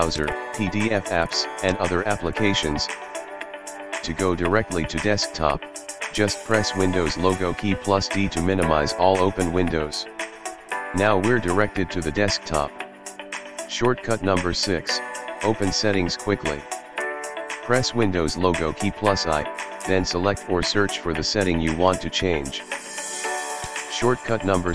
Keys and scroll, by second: 6.9 super+d, 18.8 super+i.